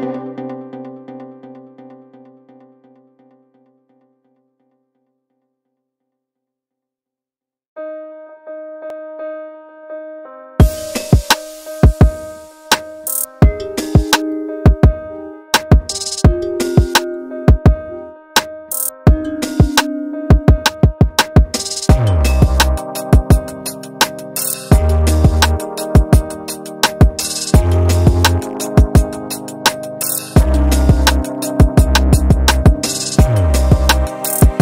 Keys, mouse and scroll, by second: 0.3 alt+click, 0.7 s, 4.6 g, 5.5 ctrl+z, 5.9 ctrl+z, 6.4 s, 7.4 Tab, 8.1 Tab, 8.5 s, 11.4 Tab, 12.0 Tab, 12.6 alt+click, 13.1 s, 14.6 Tab, 15.3-15.7 scroll up 1, 15.7-16.2 shift+middle drag, 16.2-16.5 scroll up 1, 16.5 Tab, 17.7 alt+click, 18.4 s, 19.7 Tab, 20.6 Tab, 20.8 s, 26.4 alt+click, 26.8 s, 29.5 alt+click, 29.9 s, 30.8 Tab, 31.2 click, 31.2 scroll down 6, 31.5-32.9 middle drag, 32.9 KP_1, 33.2-33.9 scroll up 2, 33.9 click, 34.1 shift+middle drag.